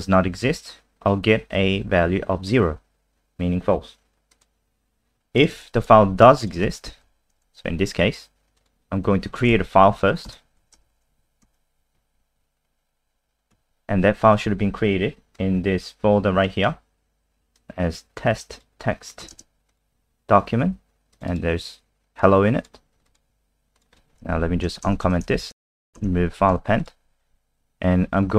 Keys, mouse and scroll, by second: 2.1 F5, 4.3 click, 5.5 ctrl+c, 5.8 click, 6.4 shift+click, 7.0 shift+Up, 8.6 click, 10.3 Return, 10.6 typing, 11.4 ctrl+s, 12.0 F5, 13.5 F3, 15.3 click, 19.7 click, 21.1 click, 21.3 click, 22.2 click, 23.3 alt+F4, 23.7 click, 24.4 shift+Home, 24.9 BackSpace, 25.0 BackSpace, 25.4 shift+Home, 26.5 ctrl+s, 26.8 click.